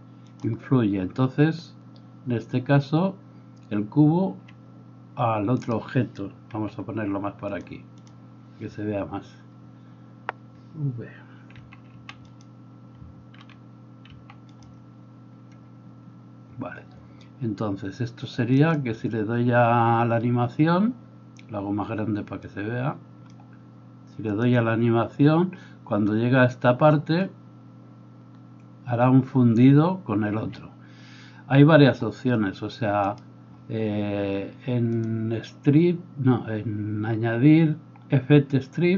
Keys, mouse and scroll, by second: 4.3 Escape, 4.8-8.0 middle drag, 5.6 right click, 6.6 g, 8.0-12.6 drag, 12.6-14.5 middle drag, 12.6 v, 14.1 alt+v, 14.5 alt+click, 14.7-22.4 alt+middle drag, 22.4-38.9 drag, 30.4 Escape.